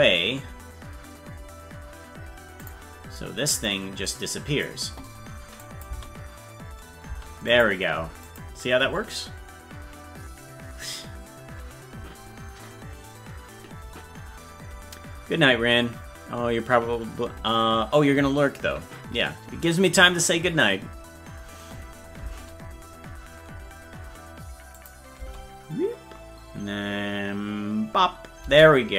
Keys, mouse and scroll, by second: 3.7 click, 5.7 click, 7.5 click, 7.5 space, 8.3 click, 24.8 click, 25.2 space.